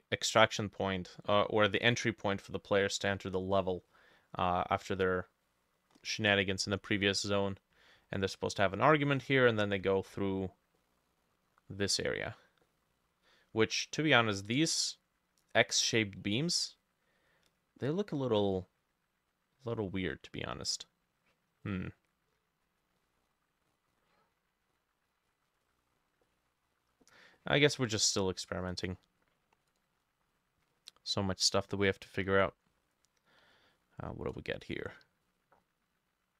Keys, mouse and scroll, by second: 2.5 middle click, 3.9 middle click, 4.5 middle click, 5.9-6.5 scroll up 3, 6.8 middle click, 9.6 middle click, 10.2 middle click, 10.8 middle click, 12.3 middle click, 12.7 middle click, 13.4 middle click, 13.8 scroll down 1, 14.1 middle click, 23.0 middle click, 23.7 middle click, 25.5 middle click, 25.7 middle click, 26.3 middle click, 27.4 middle click, 28.8-29.3 scroll down 1.